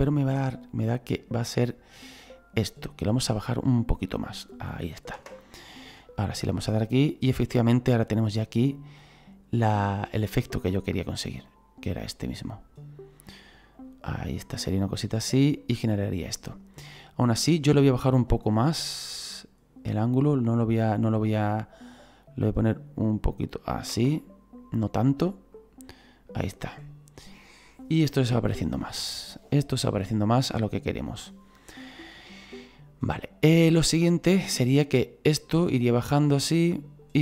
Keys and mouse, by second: 0.0 middle click, 2.4 click, 5.2 KP_0, 6.7 click, 7.4 right click, 10.7 right click, 11.5 click, 12.4 right click, 13.7 right click, 14.5 click, 17.3 KP_0, 20.0 click, 21.1 right click, 22.4 click, 23.9 KP_0, 25.5 click, 26.1 right click, 28.1 right click, 30.3 right click, 33.4 right click, 34.3 click.